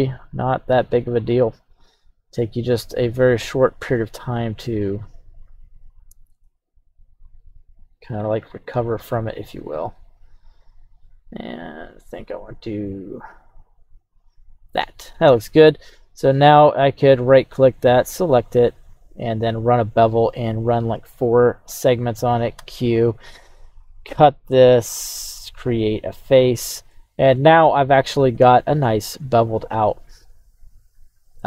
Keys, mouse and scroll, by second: 23.8-26.5 drag, 26.9 middle click, 28.9 e.